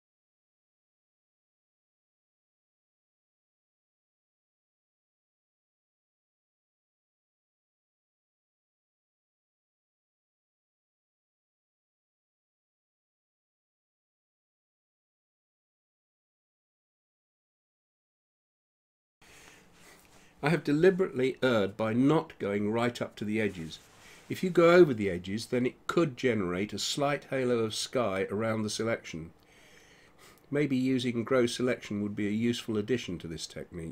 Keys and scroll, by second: 6.5 [.